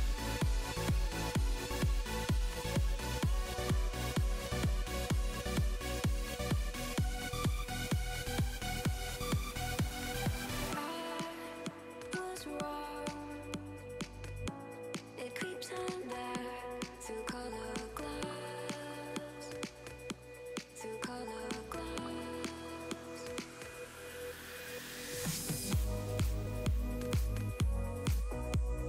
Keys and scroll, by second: 3.1 s, 25.5 F4.